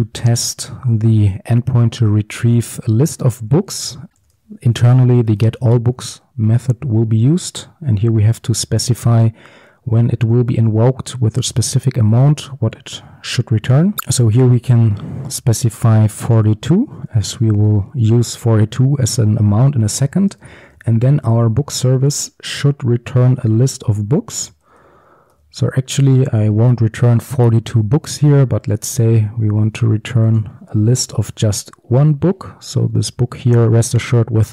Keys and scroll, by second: 4.1 Return, 4.2 ctrl+z, 5.9 Return, 14.0 ctrl+z, 22.1 Return, 28.8 Return, 32.1 ctrl+v.